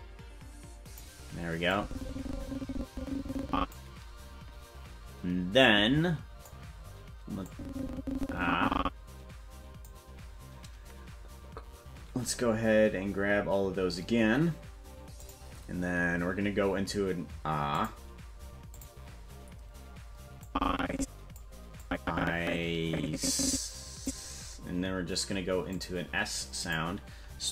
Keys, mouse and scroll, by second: 1.7-3.8 drag, 5.7 click, 7.5-9.8 drag, 15.2 click, 17.8 click, 17.9-18.7 scroll down 1, 18.7 click, 20.4 click, 21.8-24.1 drag, 25.7 click, 26.6 click.